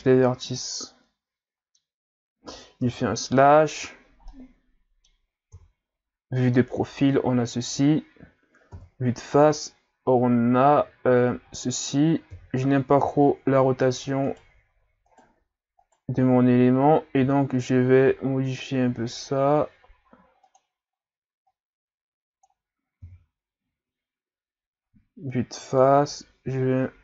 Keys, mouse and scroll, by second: 0.0 a, 0.3 scroll down 3, 0.6-2.8 middle drag, 2.8 KP_Divide, 3.9 scroll down 4, 4.3-5.5 middle drag, 5.5 KP_3, 8.7 KP_1, 11.4 scroll up 4, 12.3 KP_3, 13.2-14.1 scroll up 3, 14.3 shift+right click, 15.1 shift+right click, 15.8 shift+right click, 17.2 r, 18.4-19.4 scroll up 3, 21.5-23.0 drag, 23.0 KP_1, 24.8 scroll down 2, 26.0-27.0 drag.